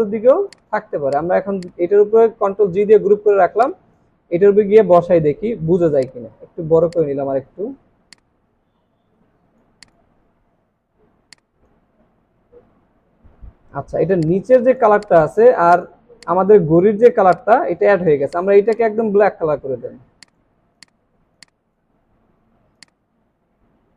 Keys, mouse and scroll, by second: 0.3 alt+scroll down 1, 0.3 space, 0.9 alt+scroll down 1, 1.1 space, 2.6 ctrl+g, 3.5 alt+scroll down 1, 4.7 alt+scroll up 1, 7.1 shift+click, 7.3 alt+scroll down 2, 10.7 alt+scroll up 1, 11.7 space, 12.2-12.5 alt+scroll up 3, 12.9 alt+scroll down 1, 16.7 alt+scroll up 1, 18.1 alt+scroll down 5, 22.1 alt+scroll up 1.